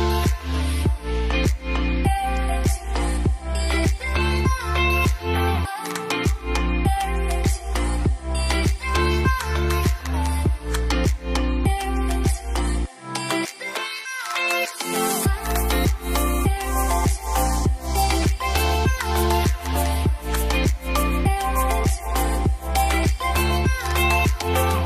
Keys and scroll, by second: 4.3-5.1 typing, 6.4 typing, 9.2-9.9 typing, 16.1-18.4 typing, 20.4 typing, 22.3-23.4 typing.